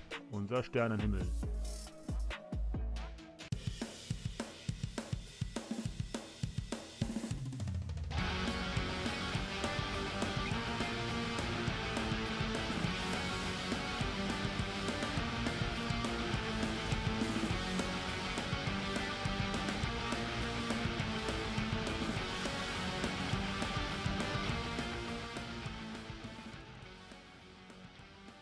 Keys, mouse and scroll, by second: 0.0 click, 0.9 middle click, 2.0-3.5 middle drag.